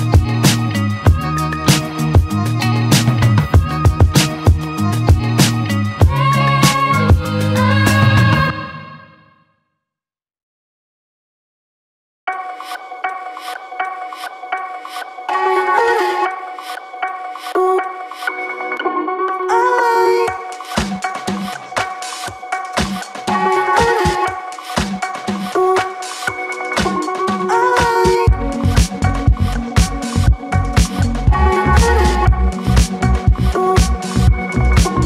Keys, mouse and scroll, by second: 0.8 click, 1.9 click, 2.5-4.3 alt+middle drag, 4.3 e, 8.4 click, 8.7 click, 10.3 click, 11.2 click, 13.0 click, 13.9 click, 14.9 click, 20.4 click, 20.7 f, 20.9 click, 21.1-21.8 scroll down 2, 21.3 click, 22.0 click, 23.1 right click, 23.9 click, 24.1 right click, 24.6 click, 24.9 right click, 27.1 click, 27.2 right click, 28.0 click, 28.3 right click, 29.8 click, 30.7 scroll down 1, 31.1 alt+middle drag, 31.4 click, 34.2 click, 34.7 click.